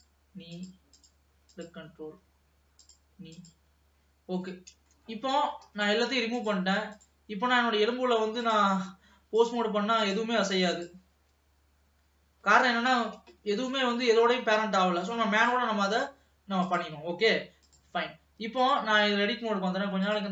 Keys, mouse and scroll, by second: 0.1 click, 0.7 click, 1.6 click, 2.1-3.0 scroll down 4, 3.0 click, 3.5 click, 4.4 scroll down 1, 4.6 middle click, 5.6 ctrl+s, 6.1 alt+a, 6.6-8.6 drag, 9.6-11.4 drag, 11.6 g, 13.9 ctrl+s, 15.5-16.9 drag, 17.8-20.3 drag.